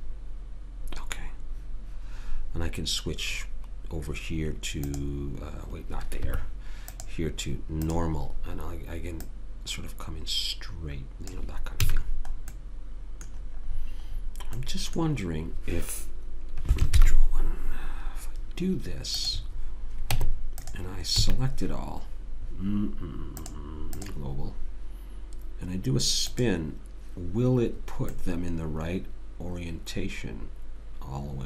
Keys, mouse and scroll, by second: 4.9 click, 6.9 click, 11.9 a, 12.0 middle click, 20.1 Tab, 21.2 a, 23.4 click, 28.2-29.9 middle drag.